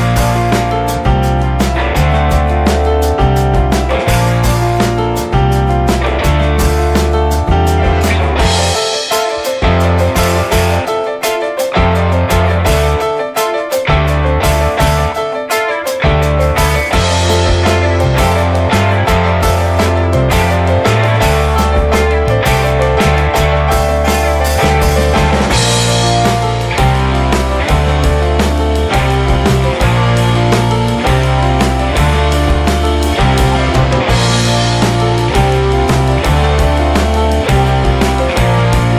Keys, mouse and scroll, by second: 1.0-1.6 drag, 1.6-2.0 scroll down 3, 2.0-3.4 drag, 4.5-5.0 scroll up 2, 5.0 click, 6.1-6.7 drag, 6.7 scroll up 3, 7.5-8.6 scroll up 4, 8.9-9.9 drag, 9.9 middle click, 10.5 click, 11.5 shift+a, 13.5 shift+a, 15.4 click, 16.0-18.1 drag, 18.6 shift+d, 19.3 shift+a, 21.2-22.1 drag, 23.1 scroll up 3, 23.3-25.9 drag, 27.0-27.5 drag, 28.6-35.9 ctrl+shift+drag, 35.9-36.5 scroll down 3, 36.5-38.7 drag.